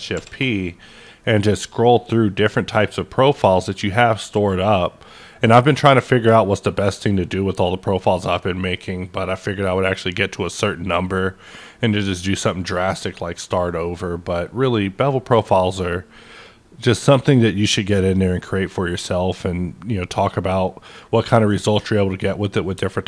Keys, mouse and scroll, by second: 0.1 shift+p, 1.3-2.3 scroll up 2, 2.3-2.9 scroll up 1, 2.9-3.4 scroll up 1, 3.4-4.0 scroll up 1, 4.0 scroll up 1, 4.5-5.6 scroll up 2, 5.6-6.6 scroll up 2, 6.6-7.7 scroll up 2, 7.7-8.8 scroll up 2, 8.8-9.4 scroll up 2, 9.7-11.1 scroll up 3, 11.1-11.5 scroll up 1, 12.2-13.4 scroll up 3, 13.4-14.3 scroll up 2, 14.3-15.8 scroll up 2, 15.8-17.6 scroll up 2, 18.7-19.2 scroll up 1, 19.2-20.1 scroll up 1, 20.1-21.8 scroll up 1, 21.8-23.0 scroll up 1.